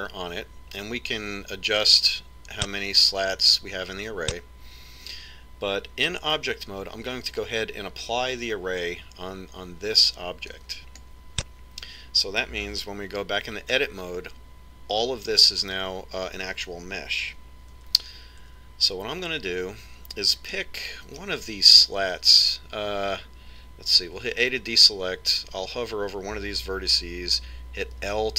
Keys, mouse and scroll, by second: 2.6-5.8 drag, 11.4 click, 14.2 Tab, 18.6 Tab, 19.3 Tab, 21.3-24.4 middle drag, 25.1 a.